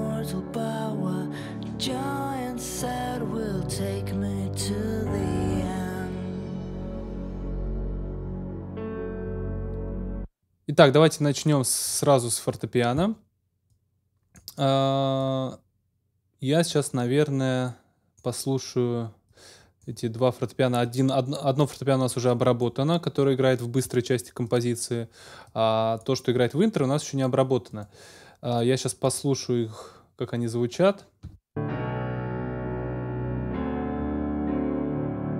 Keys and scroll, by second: 9.9 space, 31.2 space.